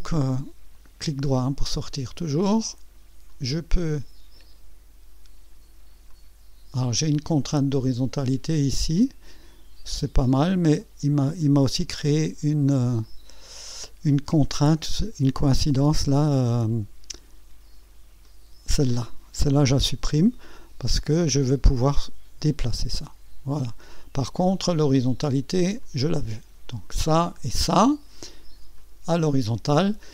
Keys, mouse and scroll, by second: 0.1 right click, 3.3-4.6 drag, 6.1-6.9 drag, 7.8-8.9 scroll up 2, 9.0-9.6 right drag, 13.0 click, 14.3-14.6 scroll up 2, 14.8 right click, 18.2 click, 20.1 Delete, 21.9-24.1 drag, 25.8 click, 27.3 click, 28.7 click.